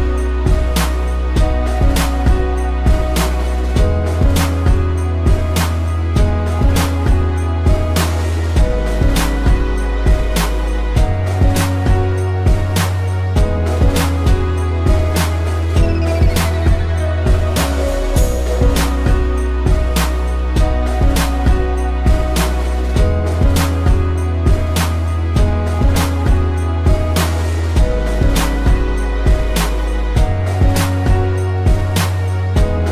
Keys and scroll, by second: 0.3 z, 0.7 space, 1.2 ctrl+-, 1.6 p, 7.4 z, 8.0 p, 10.1 a, 11.4 ctrl+0, 11.8 z, 13.5 space, 14.9 p, 22.9 space, 27.1 space, 29.3 ctrl+z.